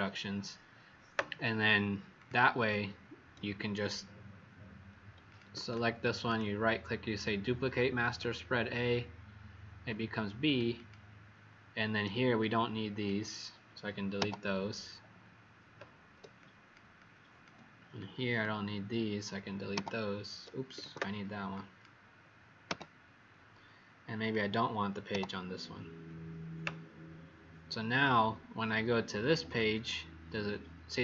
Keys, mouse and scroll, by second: 2.1 click, 2.5 click, 5.2 shift+click, 6.2 right click, 7.9 click, 10.7 click, 12.4 click, 14.1 Delete, 16.3 click, 16.9 click, 19.7 Delete, 20.7 ctrl+z, 21.5 click, 22.6 Delete, 24.2 click, 25.0 Delete, 29.4 click, 29.7 click.